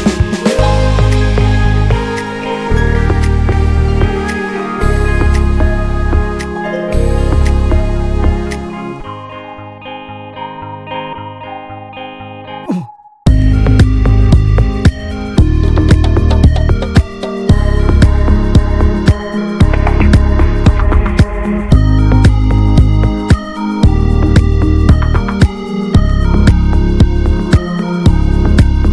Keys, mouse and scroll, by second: 0.5-1.0 shift+middle drag, 1.0 s, 4.5 shift+middle drag, 4.6 shift+scroll up 1, 4.8 s, 8.9-9.5 middle drag, 9.5 click, 9.9 Tab, 10.2 Tab, 10.3 click, 10.5 ctrl+a, 10.9 Tab, 11.7 ctrl+r, 12.6 ctrl+s, 12.7 scroll up 2, 12.9-13.3 middle drag, 13.3 ctrl+s, 13.5-14.2 drag, 15.3 scroll down 1, 15.5-16.1 middle drag, 16.1 Tab, 16.2 drag, 16.4 scroll down 1, 16.6-17.7 middle drag, 17.7-18.5 scroll up 3, 17.9 shift+middle click, 18.2 middle click, 18.5 ctrl+s, 18.8 Tab, 19.4 click, 20.9 Tab, 21.0 click, 21.2 ctrl+a, 21.7 shift+middle drag, 22.0 Tab, 22.6 click, 23.1 alt+shift+click, 23.7 alt+shift+click, 24.1 middle click, 24.2 scroll up 1, 24.4-24.9 shift+middle drag, 24.9 ctrl+b.